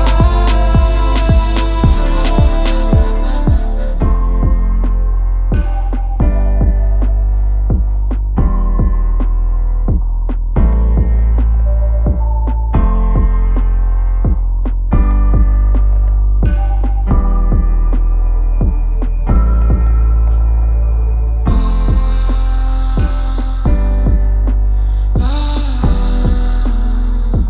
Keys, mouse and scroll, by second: 0.6 click, 1.2-2.0 typing, 2.4 click, 3.2 click, 4.7 click, 6.5-7.5 scroll, 7.5 click, 8.9 Up, 8.9 click, 9.1 Left, 9.2 Left, 9.4 Left, 12.2 click, 16.9 click, 17.9 scroll, 17.9 middle click, 18.0 middle click, 18.5 c, 21.4 click, 26.3 click.